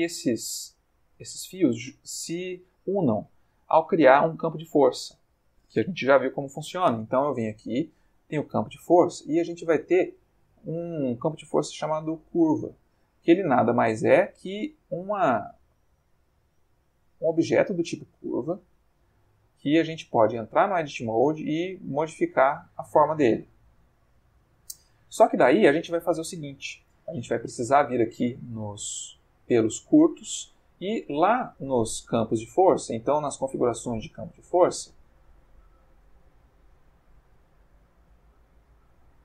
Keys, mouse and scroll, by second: 1.4-4.1 shift+middle drag, 4.2-4.7 ctrl+middle drag, 4.4 ctrl+click, 4.8-5.6 ctrl+middle drag, 6.3 shift+a, 12.2 click, 13.4-14.4 middle drag, 14.9 click, 15.6 click, 16.1 g, 17.7 click, 19.3 click, 19.8 Tab, 20.6 click, 21.1 g, 23.9 Escape, 24.8 Tab, 26.0 click, 28.9 click, 30.0 middle click, 30.9 middle click, 33.9 click, 35.7 click.